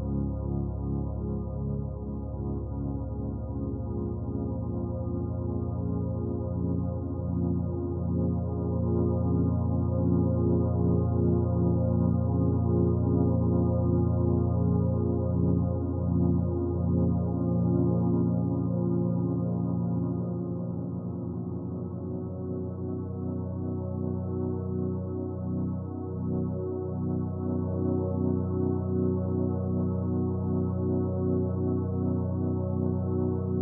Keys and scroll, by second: 31.2 ctrl+z.